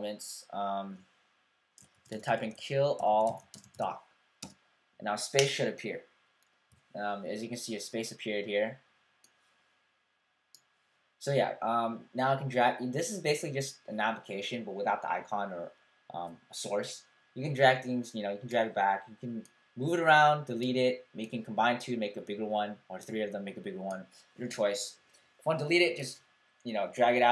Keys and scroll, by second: 1.7-4.3 typing, 6.4-7.1 typing.